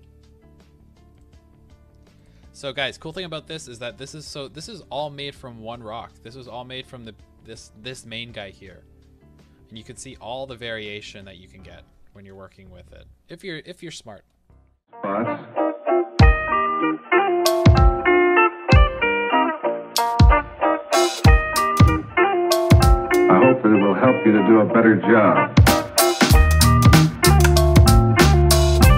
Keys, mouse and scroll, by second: 1.1 click, 2.8 KP_1, 4.0 KP_0, 4.3 KP_2, 4.4 KP_1, 4.5 KP_3, 6.2 click, 6.7-7.9 middle drag, 7.9 click, 8.5-11.1 middle drag, 11.1 click, 11.7-12.2 scroll down 1, 12.2 alt+a, 12.4-15.3 middle drag, 15.3 click, 15.4-19.6 typing, 15.5-16.0 middle drag, 16.0 click, 16.2 click, 16.3 middle click, 16.7 ctrl+z, 16.7 right click, 17.0 click, 17.6 click, 17.7 middle click, 17.9 click, 18.0-18.6 middle drag, 18.9 click, 19.0 middle click, 19.2 click, 19.7 right click, 19.8 scroll down 1, 20.1 middle click, 20.7 click, 20.7 scroll up 1, 20.9-22.9 typing, 21.2-21.7 middle drag, 21.7 click, 22.2 click, 22.4-22.8 scroll, 22.4 middle click, 23.1 click, 23.5 middle click, 24.2-27.9 typing, 24.4 click, 24.6 shift+middle click, 24.6 scroll up 2, 24.9 click, 25.2 middle click, 25.2 click, 25.4 click, 25.7 click, 26.1 click, 26.4 Right, 26.6 Right, 27.2 Left, 27.4 Left, 27.5 shift+middle click, 28.1 click, 28.3-28.9 middle drag, 28.3 scroll.